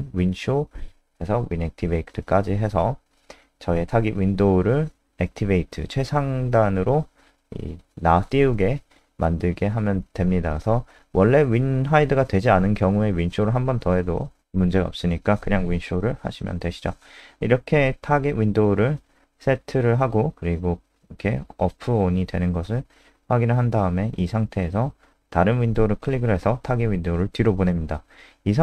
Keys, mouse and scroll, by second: 11.8 ctrl+alt+space, 16.2 KP_0, 24.2 click.